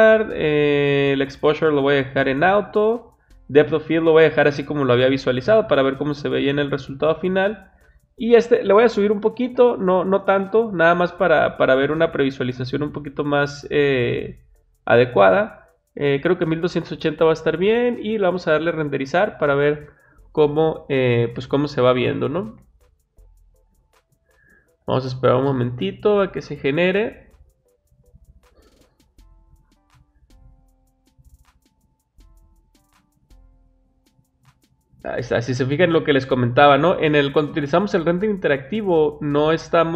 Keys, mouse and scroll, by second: 6.4 click, 8.0 click, 11.8-12.2 scroll down 2, 14.1-15.5 middle drag, 14.1-15.5 scroll up 2, 15.5 scroll down 2, 18.0 click, 29.5 click, 39.5-39.9 scroll down 2.